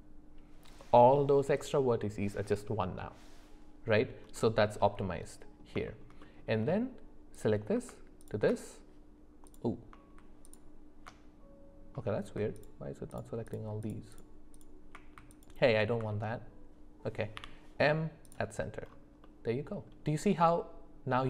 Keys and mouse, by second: 4.3-5.6 middle drag, 5.8 shift+middle click, 6.2 middle click, 7.3 click, 8.2 ctrl+shift+click, 9.5 click, 13.1 ctrl+shift+click, 14.1 ctrl+shift+click, 14.5 ctrl+shift+click, 15.3 ctrl+click, 17.4 m, 19.2 middle click.